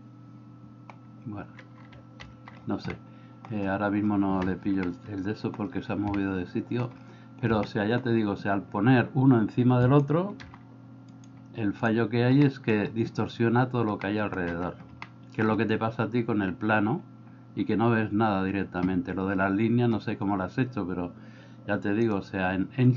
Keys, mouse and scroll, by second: 2.3 alt+g, 2.9 middle click, 5.0 middle click, 6.3 shift+middle click, 7.7 middle click, 10.5 g, 12.5 middle click, 14.0 middle click, 15.1 shift+middle click.